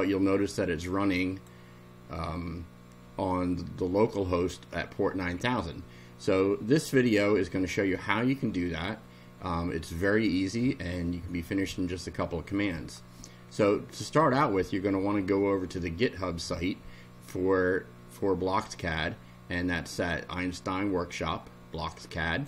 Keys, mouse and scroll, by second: 0.4-1.6 drag, 12.8 click, 20.5-22.4 drag.